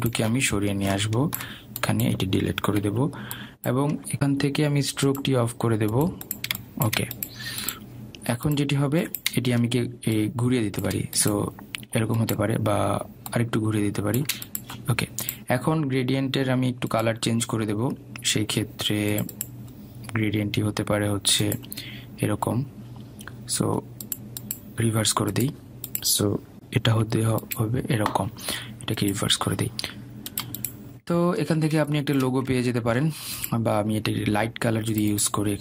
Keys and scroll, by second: 4.0 Delete.